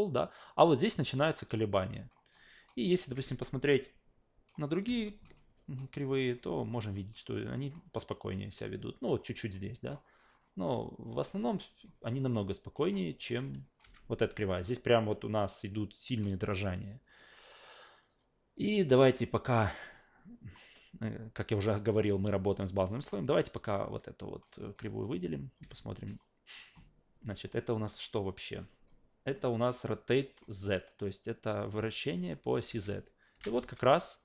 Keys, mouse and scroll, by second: 1.3 alt+right click, 2.1 alt+middle click, 2.6 alt+right click, 5.7 alt+right click, 6.6 alt+middle click, 7.1 alt+middle click, 7.6 alt+middle click, 7.9 alt+middle click, 9.0 click, 9.5 click, 9.9 alt+middle click, 10.3 alt+middle click, 10.7 alt+middle click, 11.2 alt+right click, 12.0 alt+middle click, 12.4 alt+right click, 13.1 alt+middle click, 13.6 click, 13.8 f, 14.3 click, 16.9 alt+right drag, 17.9 click, 18.1 click, 23.1 alt+right click, 24.5 alt+right click, 25.1-25.5 drag, 25.6 f, 26.1 click, 28.7 drag, 30.3 click, 31.0-31.7 drag, 32.7 alt+v, 33.3 alt+v, 33.6 e.